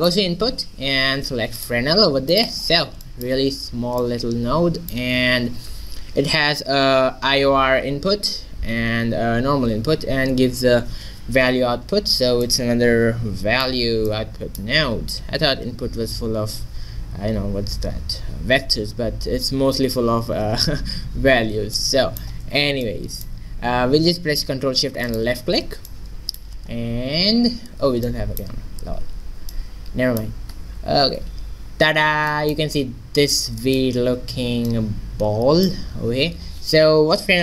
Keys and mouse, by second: 2.6-4.1 middle drag, 12.5-13.7 drag, 15.0 shift+a, 21.8-23.4 middle drag, 25.1-26.9 drag, 27.0 q, 28.9 ctrl+b, 30.8 shift+z, 34.2 ctrl+b.